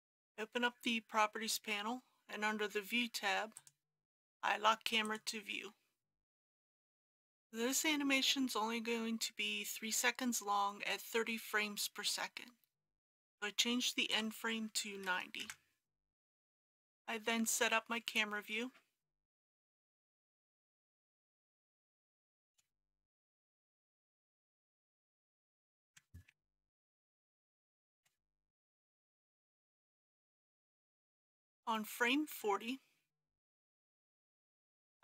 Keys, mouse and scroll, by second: 0.4 n, 3.6 click, 6.3 n, 7.0 click, 14.9 KP_9, 15.1 KP_0, 16.5 middle click, 16.7 KP_0, 18.5-19.2 scroll down 1, 19.5 shift+middle click, 20.6 shift+middle click, 21.1 scroll down 1, 21.4 shift+middle click, 25.5 click, 26.3-27.9 typing, 28.0 Return, 28.7 click, 29.0-29.7 scroll down 1, 29.7-32.8 drag.